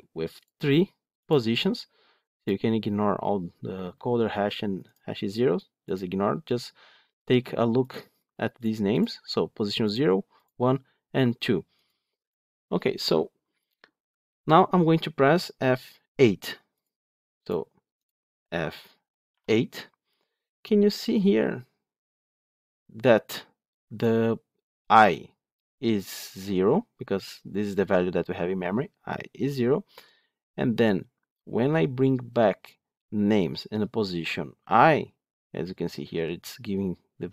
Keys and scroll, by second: 19.2 F8.